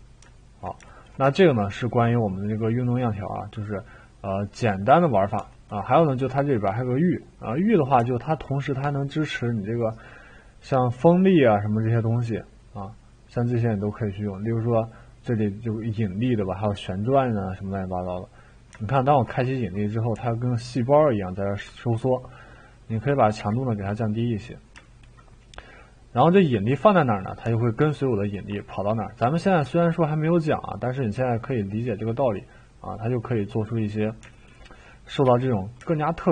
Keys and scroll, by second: 23.4 1, 35.2 3.